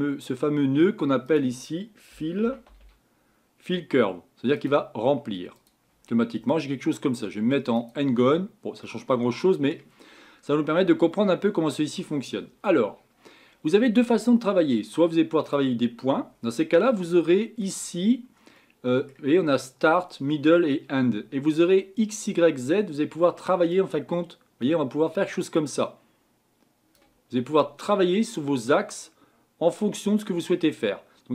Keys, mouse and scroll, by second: 4.7 l, 7.8 click, 10.2 scroll up 4, 10.9 scroll down 2, 11.2-15.4 middle drag, 15.4 click, 23.9-26.7 drag, 28.6-31.3 drag.